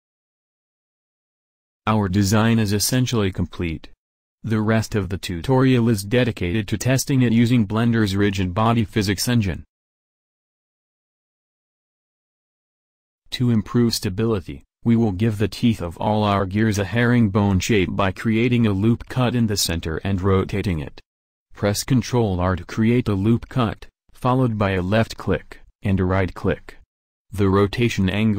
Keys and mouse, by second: 12.1 middle click, 13.9 Tab, 15.2 ctrl+r, 18.0 r, 21.7 Tab, 23.1 Tab, 24.0 a, 24.6 ctrl+r, 27.0 shift+s.